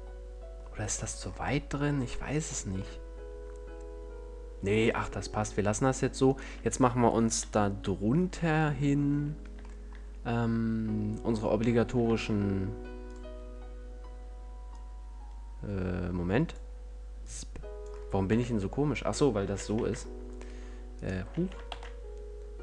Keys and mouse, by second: 0.5 click, 0.7-5.7 drag, 7.5 KP_1, 9.4 a, 12.3 shift+a, 15.0-16.8 drag, 17.5-19.7 drag, 18.6 KP_5, 19.7 s.